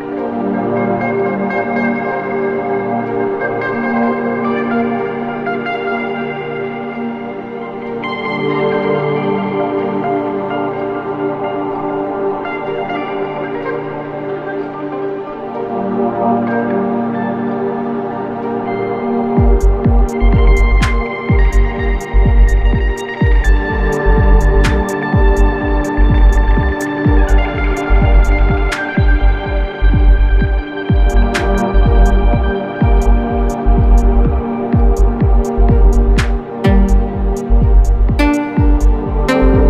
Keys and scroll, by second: 1.5 v, 7.9 a, 10.7 Left, 12.9 Right, 16.7 Left, 18.0 Right, 20.0 Right, 22.6 v, 26.5 Right, 27.2 Right.